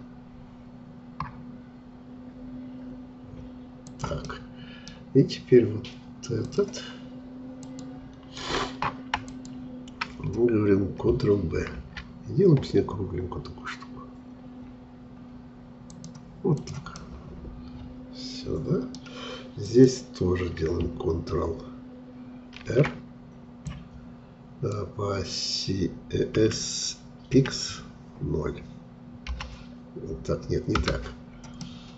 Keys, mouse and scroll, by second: 4.3-6.4 middle drag, 6.4-11.7 drag, 11.7 ctrl+b, 16.6 click, 16.9-19.6 middle drag, 19.6-22.5 drag, 22.5 ctrl+r, 31.6-31.9 middle drag.